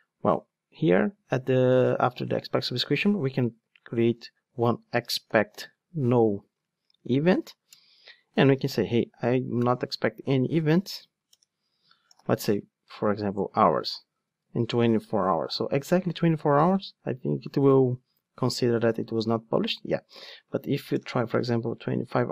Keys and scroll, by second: 7.7 Return, 10.8 alt+BackSpace, 13.3 Return, 16.6 ctrl+shift+d.